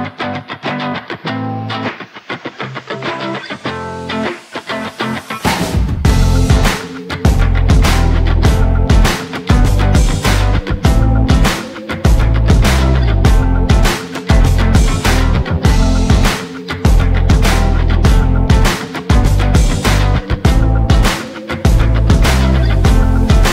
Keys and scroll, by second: 11.9 ctrl+z, 21.3 ctrl+z.